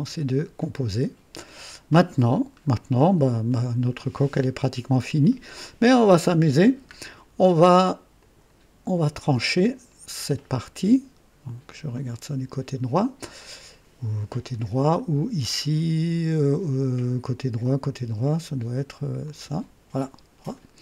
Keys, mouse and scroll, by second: 0.5-1.5 drag, 2.3-2.9 scroll down 3, 3.0 right click, 4.5 scroll up 2, 8.1 click, 9.5 click, 11.8 click, 19.1 click.